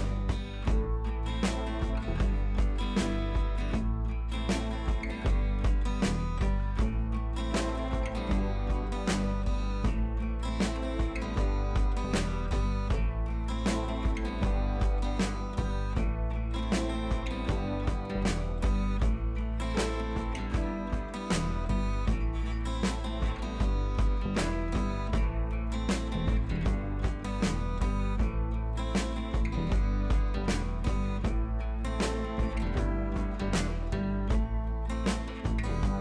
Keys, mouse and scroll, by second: 3.4 click, 4.4 scroll down 2, 5.0 ctrl+t, 5.7 click, 5.9 ctrl+t, 6.4-7.2 alt+drag, 11.5 scroll down 1, 12.5 scroll up 1, 12.8 space, 12.9 click, 13.0 space, 13.2 scroll up 1, 13.4 click, 13.6-14.0 space, 14.4-15.2 scroll down 2, 15.5-16.4 scroll up 1, 16.8-17.2 scroll up 1, 17.2-18.2 super+drag, 18.6 ctrl+z, 19.2-20.8 alt+drag, 21.6 scroll up 1, 22.1-29.5 typing, 30.0 click, 30.4 ctrl+t, 31.3-33.9 alt+drag, 34.6 Left.